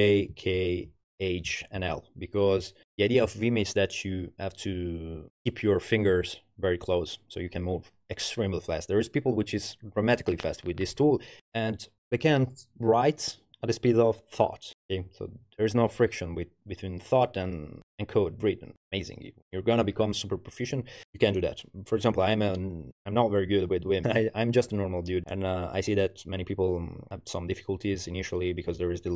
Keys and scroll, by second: 0.0-1.8 typing.